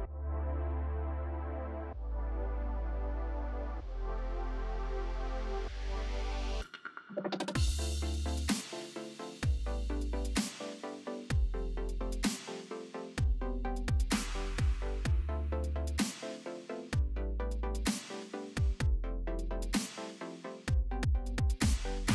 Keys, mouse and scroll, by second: 1.5 alt+scroll down 1, 2.1 shift+x, 3.4 [, 3.9 [, 3.9 [, 4.5 [, 5.5 ctrl+=, 6.2 space, 6.4 click, 6.7 space, 7.5 alt+scroll up 1, 9.4 F5, 11.0 click, 14.0 shift+x, 14.3 shift+click, 15.0 shift+x, 15.4 click, 15.5 click, 20.4 ctrl+alt+z.